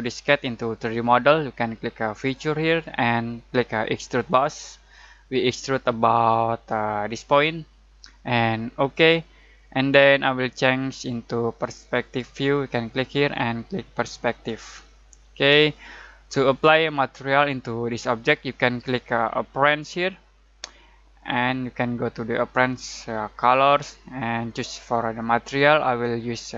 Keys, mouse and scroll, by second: 2.2 click, 2.2 click, 6.6-8.2 drag, 12.0 click, 14.5 click, 15.7-16.6 ctrl+middle drag, 19.6 click, 24.4-25.0 scroll down 1.